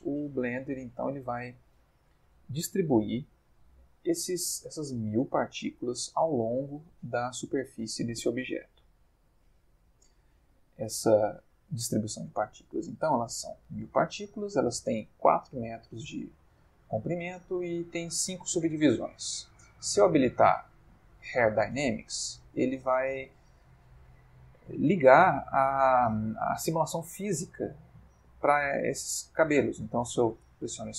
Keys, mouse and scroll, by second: 1.9-3.1 drag, 7.0-8.4 middle drag, 8.6-9.4 ctrl+middle drag, 10.7-12.0 ctrl+middle drag, 20.4 click, 30.3 space.